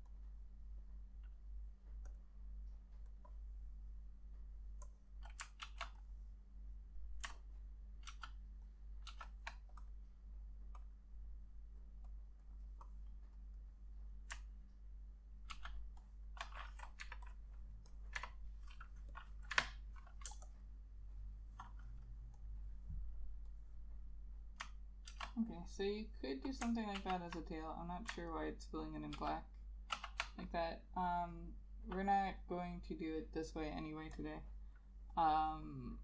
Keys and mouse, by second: 5.8 ctrl+z, 7.7 ctrl+click, 8.2 ctrl+z, 8.8 ctrl+click, 9.2 ctrl+z, 15.6 ctrl+z, 16.1 ctrl+click, 17.1 Delete, 19.6 Delete, 21.2 space, 25.2 ctrl+z, 27.1 ctrl+z, 28.4 ctrl+click, 29.3 ctrl+z, 30.1 ctrl+z.